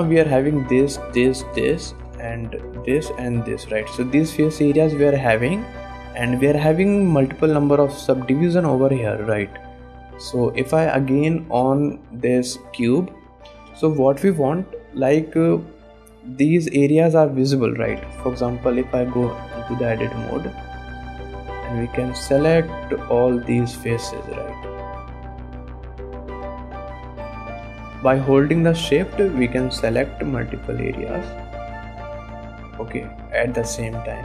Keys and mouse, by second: 0.2 click, 1.5 shift+click, 1.9 click, 2.7 shift+click, 3.0 click, 3.0 middle click, 3.6 shift+click, 4.0 click, 4.8 click, 5.5 shift+click, 6.0 click, 6.5 shift+click, 6.9 click, 7.8 middle click, 9.1 middle click, 10.2 ctrl+Tab, 11.8 click, 12.5 click, 12.9 click, 13.8 KP_1, 14.5 middle click, 15.5 middle click, 16.0 middle click, 16.5 middle click, 17.4 middle click, 18.1 KP_1, 18.9 Tab, 19.1 alt+a, 21.6 3, 22.1 click, 22.4 click, 23.6-25.1 drag, 25.4 shift+click, 26.6 shift+click, 27.9 shift+click, 29.5-31.1 shift+drag, 31.9-32.9 shift+drag, 33.3 middle click.